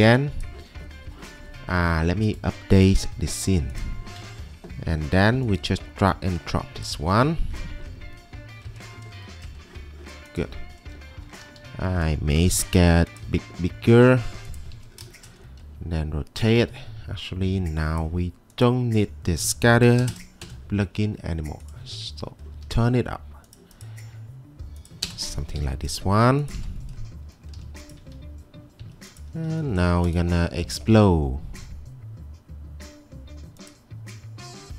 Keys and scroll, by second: 4.2 alt+Tab, 5.0 alt+Tab, 11.3 q, 11.6 w, 12.6 typing, 15.5-16.2 typing, 19.6-20.8 typing, 22.2-22.6 typing, 25.1 Return, 25.2 m, 27.7 m, 28.9 m.